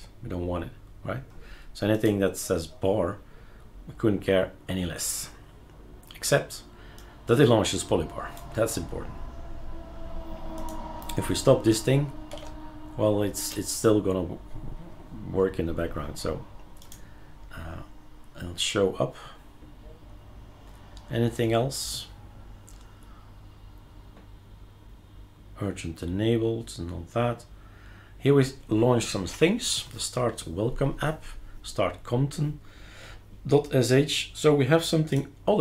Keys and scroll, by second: 12.3 shift+3.